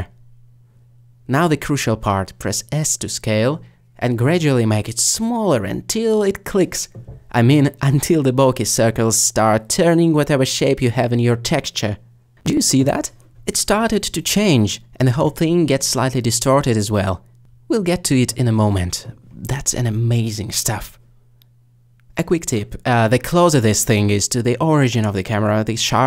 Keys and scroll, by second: 0.5 alt+s, 11.9 s, 20.4 s.